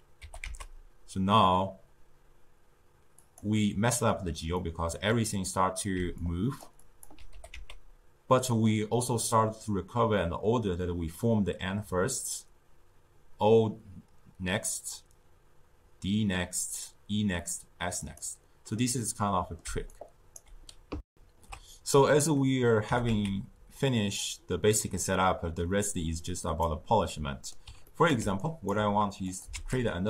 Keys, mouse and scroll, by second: 0.1 g, 4.5-5.9 middle drag, 5.9-7.3 typing, 6.1 click, 6.8 click, 18.9-19.6 middle drag, 19.6 d, 19.8 right click, 20.3 d, 21.0 ctrl+alt+shift+q, 22.7 g, 27.0-28.1 middle drag, 28.1 d, 28.3 right click, 28.6 d, 29.2 click, 29.4 shift+d.